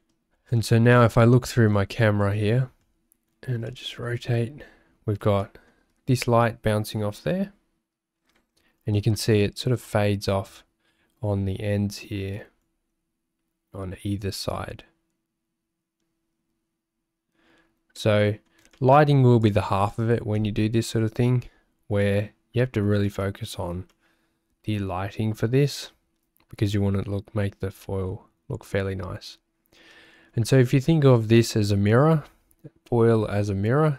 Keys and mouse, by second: 2.8 middle click, 3.7 shift+middle click, 5.4 shift+middle click, 7.5 `, 18.0 middle click, 18.8 shift+middle click, 19.5 click, 23.3 shift+middle click, 24.0 middle click, 30.1 shift+click.